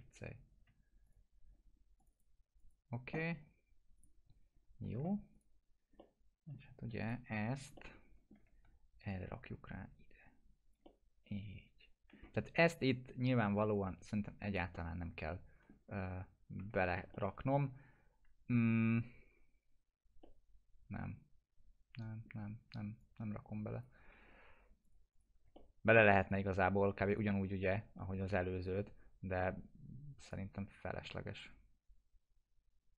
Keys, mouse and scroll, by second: 2.1 right click, 2.6 click, 4.6 alt+q, 5.3 click, 6.0-6.6 alt+middle click, 7.0 click, 7.7-8.4 alt+middle click, 8.5 w, 9.1-12.4 drag, 10.8-12.4 alt+middle drag, 12.4 scroll up 1, 13.7-14.6 click, 14.7-16.0 alt+middle drag, 16.1 F4, 17.2-18.7 alt+middle drag, 20.3-22.4 alt+middle drag, 23.0-23.9 click, 24.0 F4, 24.8 click, 25.6-26.2 alt+middle click, 26.3 click, 30.3 click.